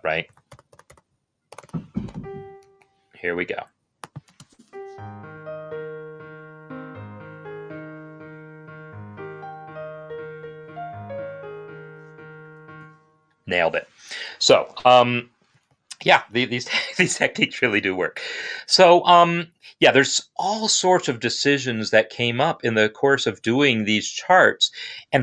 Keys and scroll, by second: 0.8-2.5 typing, 2.6 Escape, 4.2 space, 12.6 space.